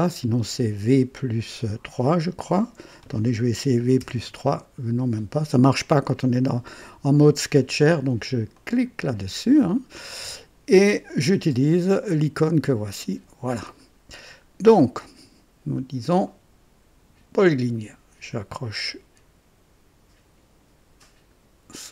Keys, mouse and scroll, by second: 4.0 v, 4.1 KP_3, 8.5 click, 12.8 click, 14.5 scroll up 2, 14.9 right click, 17.3 click, 21.0 click.